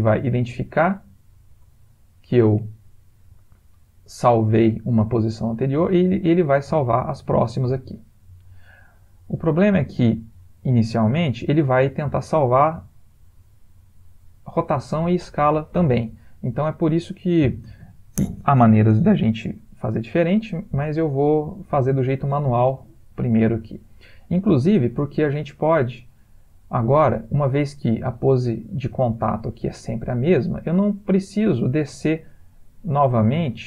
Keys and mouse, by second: 6.3 click, 12.4 middle click, 20.7 ctrl+z, 21.6 ctrl+z, 24.2 click.